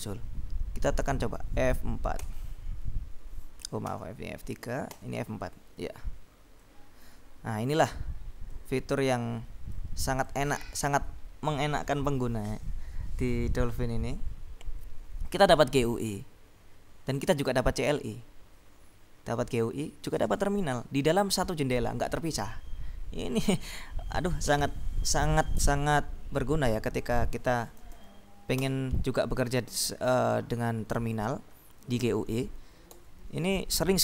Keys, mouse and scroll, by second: 1.1 click, 2.4 F3, 3.9 F3, 5.0 F4, 6.9-8.3 drag, 8.6-11.2 drag, 23.5 click, 27.2 click, 27.7-28.5 typing, 28.7 Return, 33.0 ctrl+l.